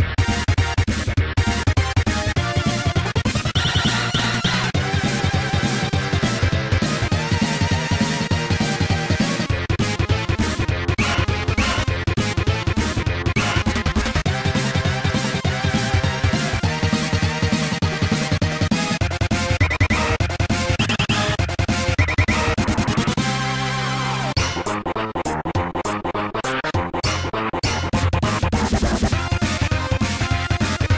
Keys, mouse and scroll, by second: 0.9 0, 3.7 right click, 6.0 click, 6.1 click, 7.0 Tab, 7.4 click, 9.1 click, 10.1 0, 11.5 scroll up 2, 12.8 click, 12.9 click, 13.3 right click, 13.9 right click, 14.0 shift+right click, 14.3 right click, 14.4 shift+right click, 14.8 x, 16.4 click, 16.6 click, 17.4 ctrl+z, 17.8 ctrl+z, 19.3 click, 23.1 shift+right click, 23.5 x, 24.9 click, 26.2 ctrl+s, 26.5 click, 26.6 click, 28.9 i.